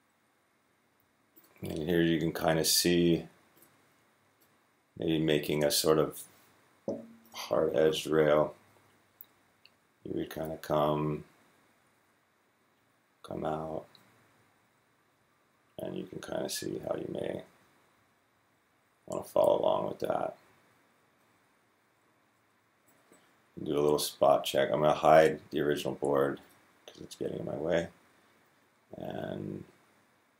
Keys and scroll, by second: 8.5 Right, 8.6 Right, 8.9 Right, 9.2 Right, 10.3 Right, 13.1 Up, 13.1 s, 13.8 Left, 14.3 Left, 14.5 Left, 14.7 Left, 14.9 Left, 15.0 Left, 15.1 Left, 15.2 Left, 15.4 Left, 15.5-18.0 Left, 16.3 Down, 16.5 Down, 17.0 Down, 17.6-18.0 Down, 17.8 s, 18.0 s, 18.7 Right, 18.8 Right, 20.3 s, 21.0 Left, 21.8 Left, 22.2 Down, 22.7 Right.